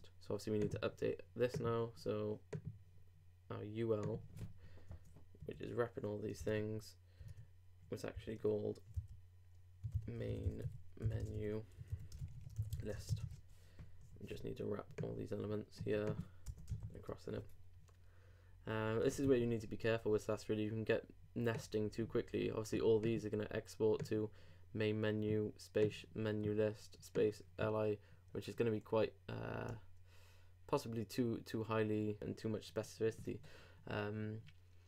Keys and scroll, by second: 6.4 super+Up, 6.5 super+Tab, 8.1 super+., 11.9-13.7 typing, 14.0 shift+Delete, 16.7 shift+Return, 16.8 shift+].